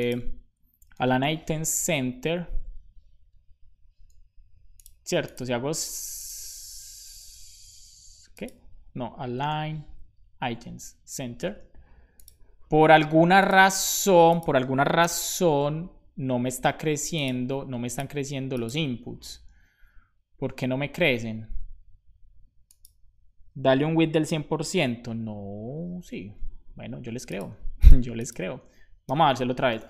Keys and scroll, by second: 29.2-29.8 typing, 29.2 Return.